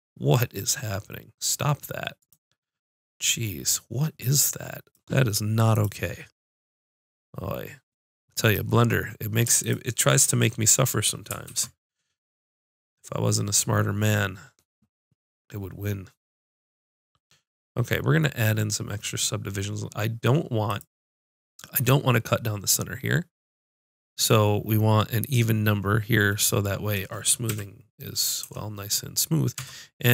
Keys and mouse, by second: 2.3 click, 3.1 middle click, 4.0 click, 6.7-11.5 drag, 10.4 middle click, 10.8 right click, 11.5 ctrl+b, 20.8-26.9 drag, 27.5 a, 28.5 Tab, 29.6 Tab.